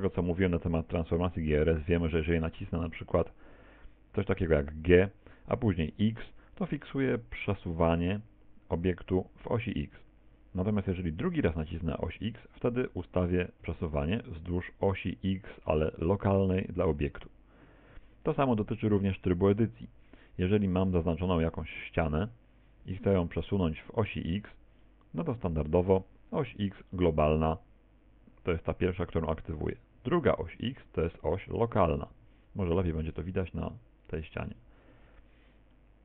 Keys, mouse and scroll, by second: 4.9 g, 18.5 Tab, 19.5 middle click, 21.5 right click, 22.2 right click, 22.7 shift+right click, 23.1 middle click, 24.9 middle click, 26.5 g, 33.1 right click, 33.6 shift+right click, 34.1 shift+right click, 35.7 middle click.